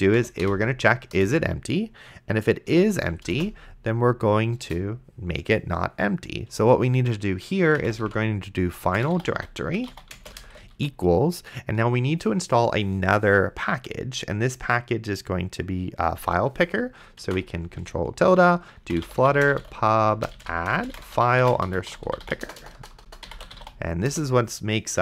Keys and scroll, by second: 0.0-1.0 typing, 1.2 Return, 2.7 End, 3.2 space, 3.6 shift+[, 4.6 Return, 7.4-10.8 typing, 17.5 ctrl+`, 18.6-24.4 typing.